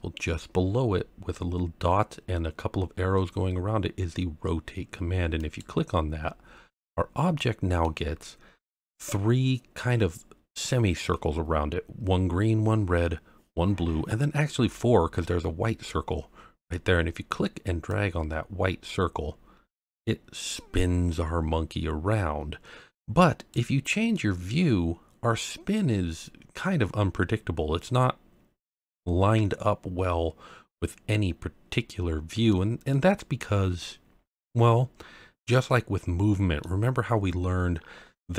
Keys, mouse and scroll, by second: 5.4 click, 7.3-7.8 middle drag, 8.1 scroll up 1, 17.9 click, 24.1-32.5 middle drag, 32.9-36.6 middle drag.